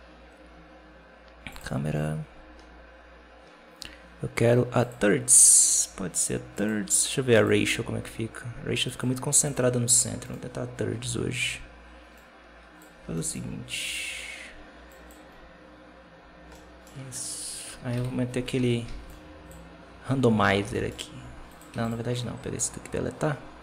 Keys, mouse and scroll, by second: 2.3-3.2 scroll down 1, 3.2-4.7 scroll down 10, 4.7 click, 6.4 click, 7.2 click, 8.7 click, 9.3 click, 10.2 right click, 12.0-13.1 drag, 13.1 alt+d, 16.4-16.8 middle drag, 16.8-17.6 scroll down 1, 17.6 KP_7, 17.8 z, 18.3 scroll down 1, 18.5 alt+a, 18.7 b, 20.9 alt+d, 21.6 x.